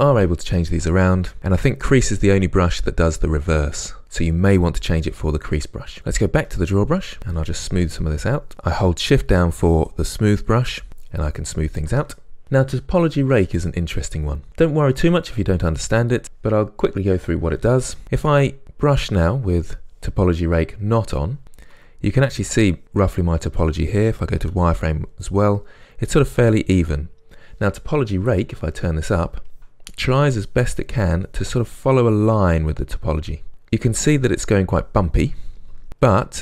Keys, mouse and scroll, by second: 6.5 click, 7.2-18.3 shift+drag, 18.0 f, 18.9-21.4 drag, 21.4-28.5 ctrl+middle drag, 24.5 z, 28.5-29.6 drag, 29.6 ctrl+middle click, 30.2-33.5 drag, 33.5-36.4 middle drag.